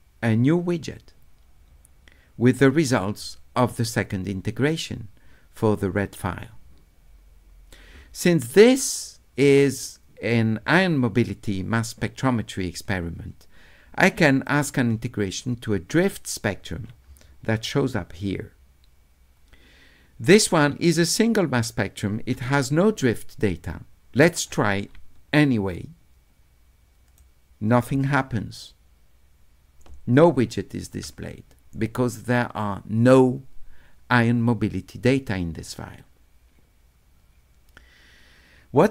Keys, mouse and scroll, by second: 14.2 d, 14.4-16.0 right drag, 25.0 d, 25.4-27.2 right drag.